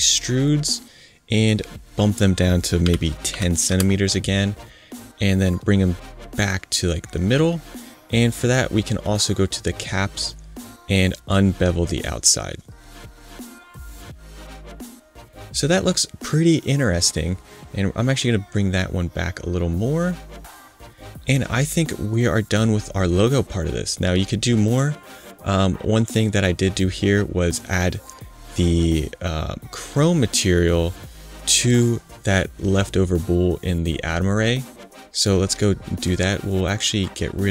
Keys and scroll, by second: 2.8 i, 3.3 0, 3.6 Return.